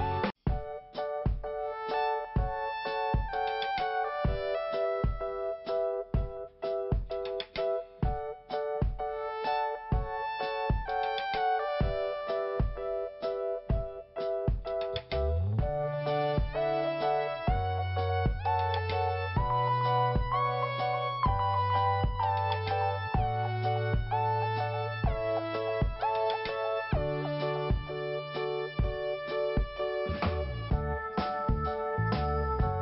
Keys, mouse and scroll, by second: 1.5 click, 6.2-6.5 scroll up 1, 8.1 click, 9.6 click, 10.4 click, 11.7 click, 13.5 click, 14.6 click, 19.4 scroll down 1, 20.6 click, 26.3 i, 28.5 click, 30.4 click, 31.7 i, 32.4 scroll up 1.